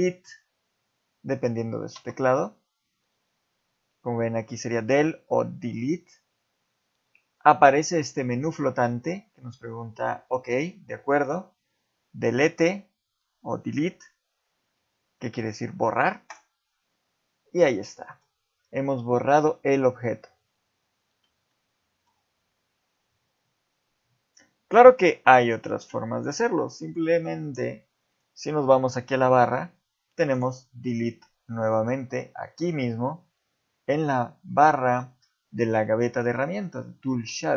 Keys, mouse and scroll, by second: 1.9 Delete, 18.0 middle click, 18.9 middle click, 21.5 shift+middle click, 28.1 click, 30.3 click, 37.2 shift+middle click.